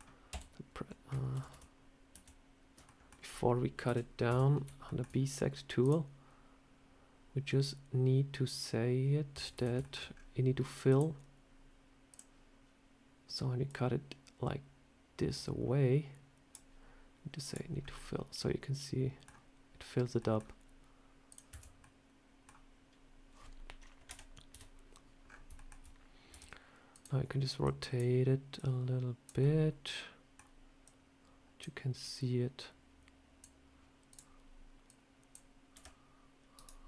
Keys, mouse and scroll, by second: 0.2 f, 1.2 ctrl+z, 1.4 ctrl+z, 2.0 ctrl+z, 2.7 middle click, 3.7 KP_7, 4.2 Tab, 4.7 shift+middle click, 5.7 click, 9.2 Tab, 9.4 a, 9.7 shift+middle click, 10.0 scroll down 3, 10.8 click, 17.4 click, 17.7 scroll up 2, 17.8 middle click, 19.2 scroll down 1, 20.0 scroll up 1, 20.1 middle click, 20.3 scroll down 1, 21.2 click, 21.4 Tab, 21.7 middle click, 23.9 KP_1, 24.4 KP_3, 25.1-25.4 scroll up 4, 25.4 shift+middle click, 26.2 r, 27.5 click, 28.4 click, 29.3 middle click, 30.7 click, 31.9 click, 34.0 click, 34.7 click, 35.6 r, 36.7 middle click.